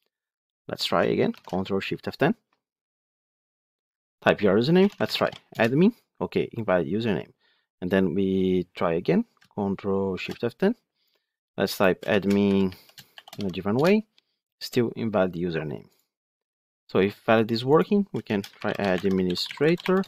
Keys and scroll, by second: 1.2 ctrl+shift+F10, 10.3 ctrl+shift+F10, 15.9 ctrl+F5.